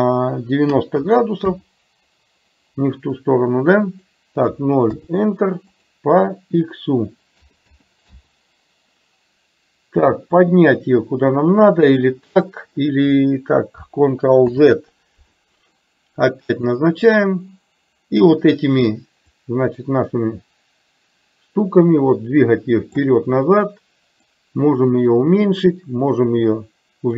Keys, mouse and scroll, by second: 3.9-5.3 drag, 5.7-8.6 drag, 10.4-12.2 drag, 14.6 ctrl+z, 19.3-23.1 drag, 24.3-27.1 drag.